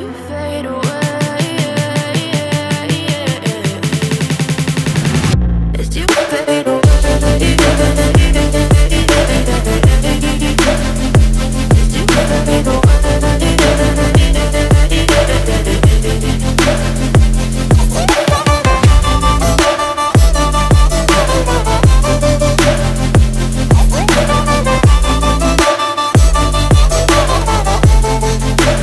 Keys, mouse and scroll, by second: 8.7-28.8 drag.